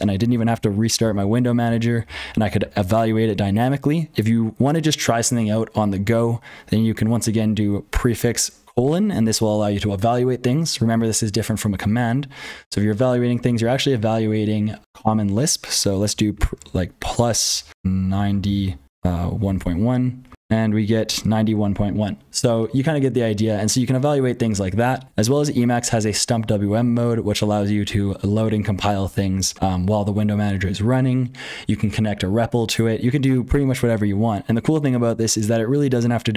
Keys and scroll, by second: 0.0-36.3 typing, 7.9 ctrl+z, 20.3 Return.